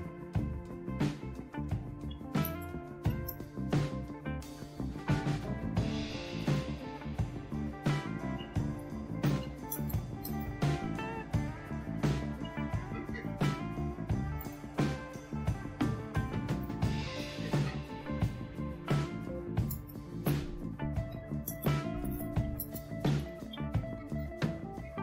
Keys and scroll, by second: 2.1-3.3 typing, 5.7-6.5 typing, 8.1-10.2 typing, 11.4-13.1 typing, 14.3 Return, 15.3-16.8 typing, 19.2-25.0 typing.